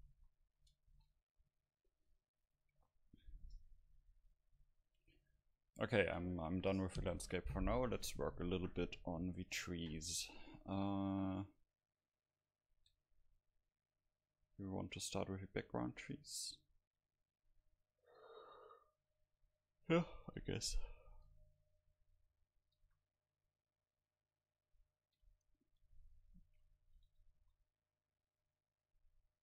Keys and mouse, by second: 0.0 a, 0.2 a, 1.0 ctrl+s, 1.0 a, 5.1-9.1 middle drag, 12.8-15.9 middle drag, 22.2-24.1 drag, 22.8 shift+a, 25.2 KP_Divide, 26.6 KP_1, 27.1 Tab, 27.4 s, 28.6-29.4 drag.